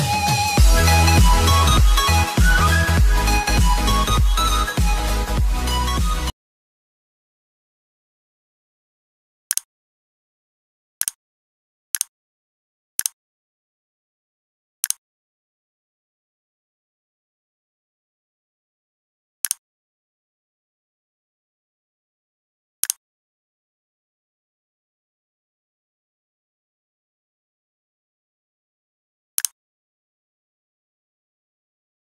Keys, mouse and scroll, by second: 1.4-2.1 scroll down 1, 2.1 click, 3.4 ctrl+Num_Lock, 4.3 click, 5.3 click.